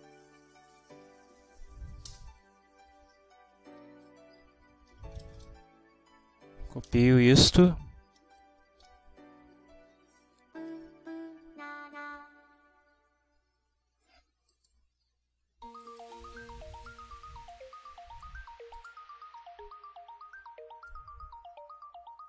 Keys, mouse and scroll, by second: 0.0-1.4 typing, 2.1 Return, 3.8 Up, 5.0 shift+End, 5.4 ctrl+shift+c, 5.7 ctrl+shift+Down, 6.9 ctrl+shift+v, 7.6 Left, 7.9 Delete, 8.2 1, 14.6 click, 15.9 click, 16.8 click, 18.8 click, 20.9-22.2 drag.